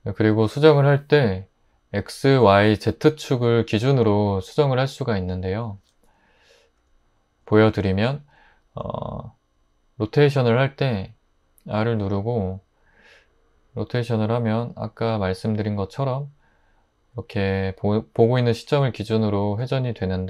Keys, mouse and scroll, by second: 11.7 r.